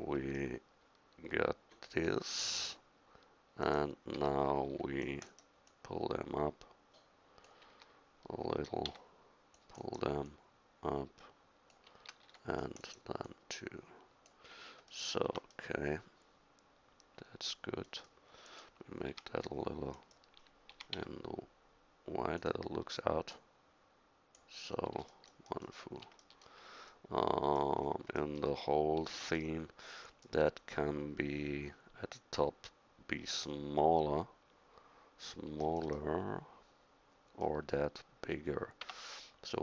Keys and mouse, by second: 4.2 a, 4.7 c, 7.7 a, 8.9 c, 11.9 a, 15.3 Tab, 18.5 right click, 19.1 s, 19.9 click, 20.7 s, 36.6 middle click, 38.8 Tab.